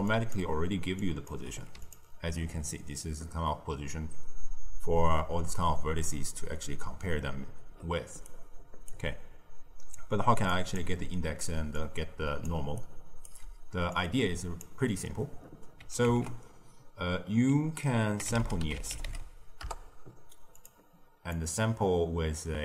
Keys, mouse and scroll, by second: 0.0 click, 0.4-0.8 d, 0.9 click, 1.2 d, 1.4 d, 1.8 ctrl+shift+click, 4.6-11.1 typing, 8.2 right click, 10.4 click, 11.7-12.4 drag, 12.4-12.7 d, 12.7 right click, 13.2 d, 13.8 click, 16.0 ctrl+a, 21.3 click.